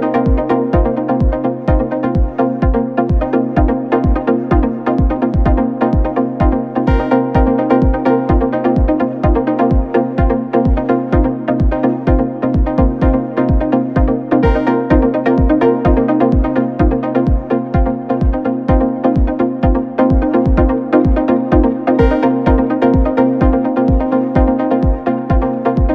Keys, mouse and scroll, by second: 6.7 click, 14.3-16.9 drag, 18.6-21.6 drag, 24.4-24.7 middle drag, 24.7 scroll down 1, 25.0 middle click, 25.5 scroll up 1.